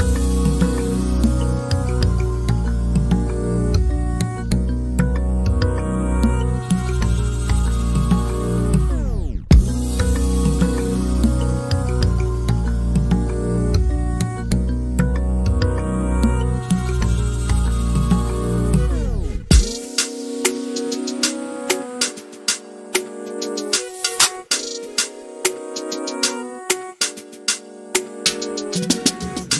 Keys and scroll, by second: 0.0-0.3 typing, 2.1 l, 5.1 k, 9.3 r, 13.7 e, 16.3-17.8 typing, 21.7 m, 22.7-23.7 typing, 23.7 Return, 26.8 typing, 28.5-29.3 typing.